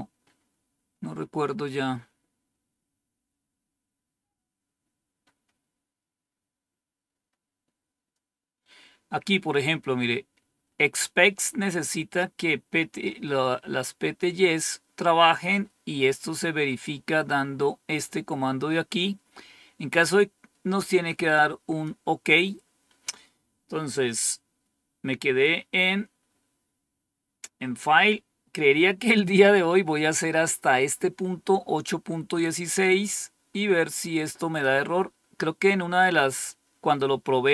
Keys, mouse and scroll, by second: 0.0-1.1 scroll up 2, 1.1-1.8 scroll up 1, 3.8-4.6 scroll up 2, 4.6-5.3 scroll up 1, 21.0 click, 32.8-34.6 drag.